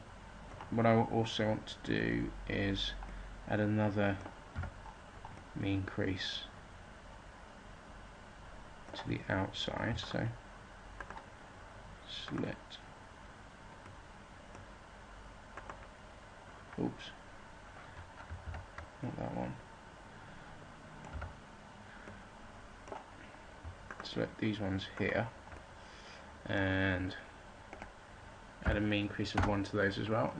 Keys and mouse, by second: 0.5-4.5 middle drag, 4.5 z, 10.0-15.4 middle drag, 18.4 ctrl+z, 21.1 z, 21.8-23.5 middle drag, 25.8-27.2 middle drag, 29.4 middle click.